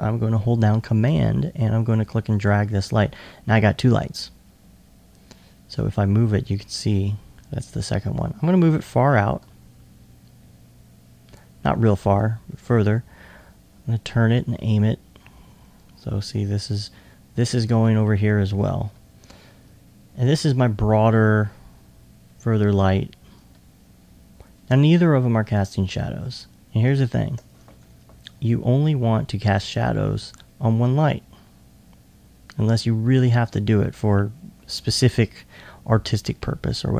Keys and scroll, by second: 12.2 r, 18.9 2, 19.6 2, 21.5 typing, 29.3 typing.